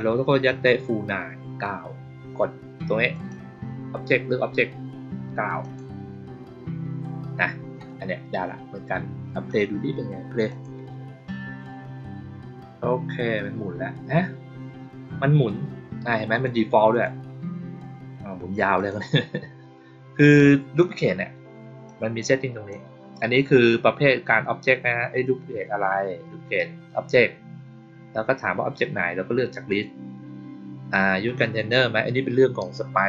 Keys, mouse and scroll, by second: 3.0 click, 5.5 click, 10.4 click, 16.2 click, 16.8 click, 18.7 click, 20.1 click, 21.8-22.6 drag.